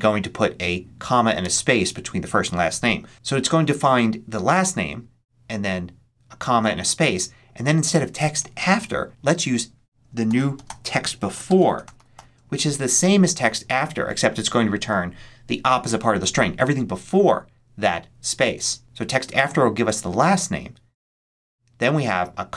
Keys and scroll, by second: 9.9-12.5 typing.